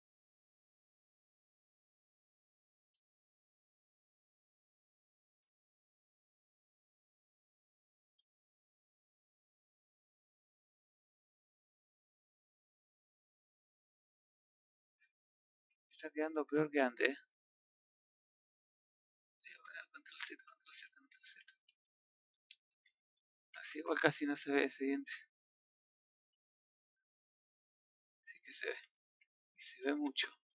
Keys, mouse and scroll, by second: 0.0-1.8 middle drag, 1.8 click, 2.4 middle click, 2.8 g, 5.1 middle click, 5.6 scroll up 1, 6.1 middle click, 6.5 scroll down 4, 7.0 middle click, 7.5 click, 7.8 scroll up 1, 8.8 z, 9.4-10.2 scroll down 1, 10.2 click, 11.5 click, 12.5-14.4 drag, 14.4 scroll down 1, 14.6 middle click, 15.1 Tab, 15.9-16.3 scroll down 1, 16.7 z, 16.9 scroll down 1, 17.2-18.5 middle drag, 18.5-19.2 scroll up 1, 19.2-22.3 scroll up 1, 22.3-23.2 scroll up 1, 23.5 ctrl+z, 23.8 ctrl+z, 26.1-26.7 scroll down 8, 26.7-28.1 middle drag, 28.4 ctrl+z, 28.8 ctrl+z.